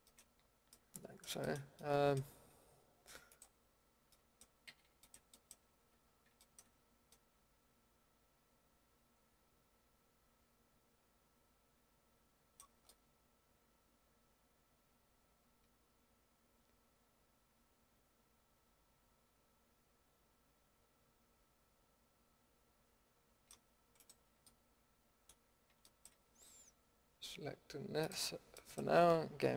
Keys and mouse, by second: 0.3 middle click, 4.7 a, 12.6-13.8 middle drag, 24.0 click, 24.4-25.8 middle drag, 28.0-28.6 drag, 28.6-29.5 middle drag.